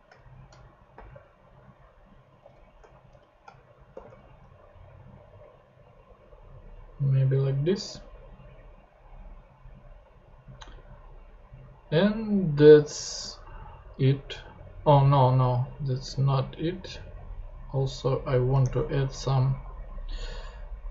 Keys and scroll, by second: 0.0 shift+super+Tab, 0.1 shift+super+Left, 0.6 shift+Left, 0.9 shift+9, 1.1 super+Tab, 2.4 super+Tab, 3.1 shift+super+Left, 3.9 shift+7, 4.0 super+Tab, 18.6 super+Tab.